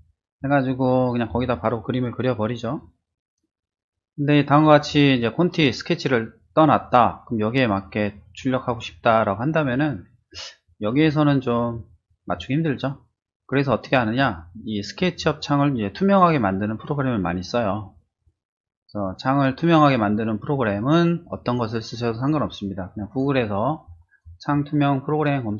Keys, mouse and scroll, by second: 10.3 click, 11.0 shift+middle click, 11.8-12.3 shift+middle drag, 12.4-13.3 shift+middle drag, 13.6 middle click, 13.9-16.5 middle drag, 23.1 click, 24.1 click.